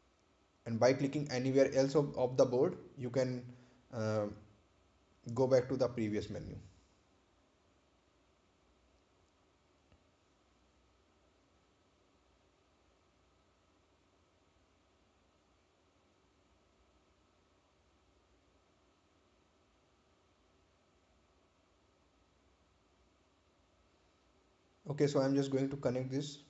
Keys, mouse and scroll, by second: 0.5 ctrl+click, 1.7 scroll down 1, 3.3 ctrl+click, 12.6-13.2 scroll down 1, 13.2-13.8 scroll up 1.